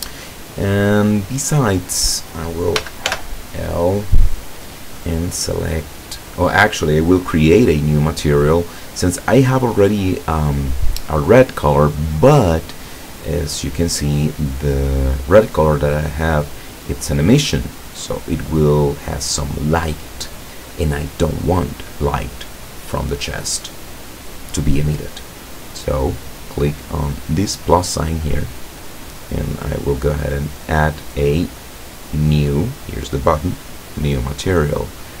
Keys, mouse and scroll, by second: 0.4 right click, 2.8 l, 4.5 click, 7.6-9.4 drag, 16.4 click, 25.6 click, 27.0 click, 28.6 click, 32.5 click.